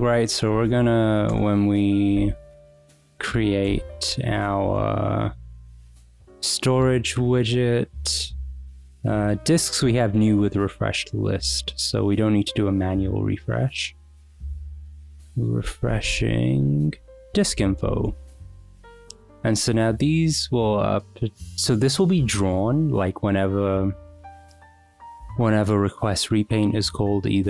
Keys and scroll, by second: 0.0-1.4 typing, 2.5 shift+;, 2.8 Return, 3.7 Escape, 4.4 Escape, 4.7 w, 5.0 Return, 15.8-18.7 typing, 17.4 Escape, 23.1 Return.